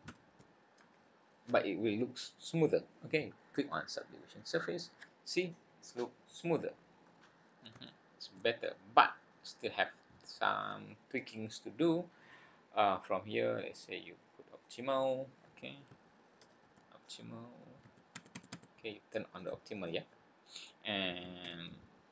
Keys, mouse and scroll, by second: 5.6-6.6 scroll up 8, 6.6-7.5 scroll down 12, 7.8 shift+middle click, 8.5-9.0 scroll up 3, 9.6-9.9 scroll up 1, 14.6 click.